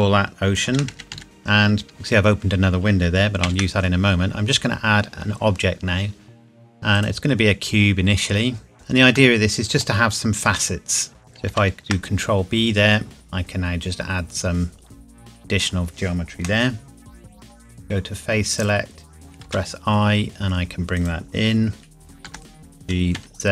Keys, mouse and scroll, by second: 0.7-1.8 typing, 1.2 shift+middle click, 3.4 shift+a, 7.0 click, 8.7 KP_Decimal, 9.2 middle click, 9.8-10.1 scroll down 1, 10.5 Tab, 11.5 ctrl+b, 15.4 click, 17.8 click, 19.4 i, 21.0 click, 22.2 g, 23.2 z.